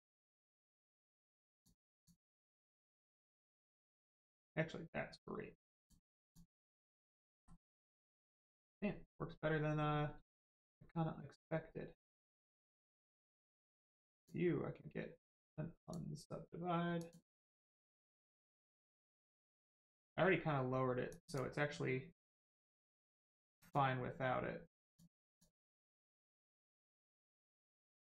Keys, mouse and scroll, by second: 1.5 click, 3.9 click, 6.2 click, 6.5 scroll down 1, 6.8 middle click, 7.3 shift+middle click, 7.9 click, 8.3 shift+middle click, 9.7 scroll up 1, 10.3 shift+middle click, 12.7 click, 15.7 click, 18.0-18.6 scroll down 1, 18.6 click, 19.0 middle click, 19.7 shift+middle click, 21.1 middle click, 23.4 click, 25.6 middle click, 26.2 shift+middle click, 26.5 middle click, 26.6 middle click.